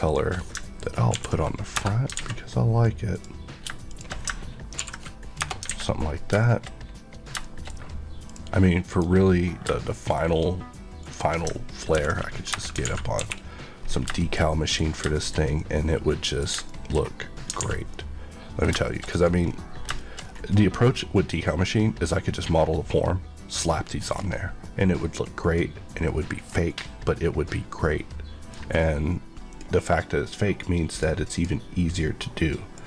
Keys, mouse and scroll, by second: 1.1 ctrl+click, 1.1 ctrl+l, 1.7 Return, 2.1 alt+a, 3.1 click, 3.8 shift+click, 4.7 ctrl+l, 5.4 Return, 5.6 alt+a, 6.0 scroll down 1, 6.3 shift+middle click, 6.8-7.3 scroll down 1, 7.4 shift+middle click, 8.3 shift+click, 8.8 shift+click, 9.7 shift+middle click, 10.9 click, 11.9 ctrl+l, 12.5 Return, 12.8 alt+a, 13.1 KP_1, 13.8-14.1 scroll down 1, 14.1 shift+middle click, 14.5 middle click, 14.8-15.1 scroll up 2, 15.1 shift+middle click, 16.6 shift+middle click, 17.5 alt+a, 17.9 middle click, 18.8 shift+middle click, 19.0 scroll up 1, 19.8-20.2 shift+scroll up 2, 20.0 shift+middle click, 20.5 middle click, 24.1-24.6 scroll down 1, 24.6 middle click, 27.4 middle click, 29.4 click, 30.9 click.